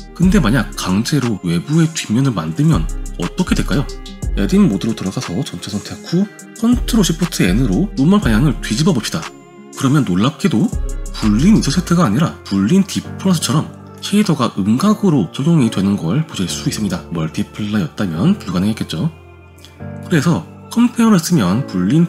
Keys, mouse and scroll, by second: 2.9 g, 5.6 Tab, 7.6 ctrl+shift+n, 8.9-9.9 middle drag, 10.1 Tab, 10.8 g, 15.2 click, 16.1-17.0 drag, 18.2-19.8 drag, 20.5-21.7 drag.